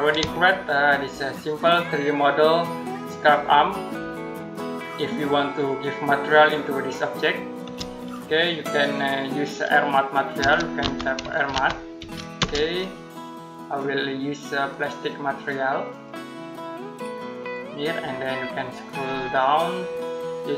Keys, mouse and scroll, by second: 0.3 shift+middle click, 10.0-12.2 typing, 14.5 click, 17.9-18.9 scroll down 1, 18.9-20.5 scroll up 1.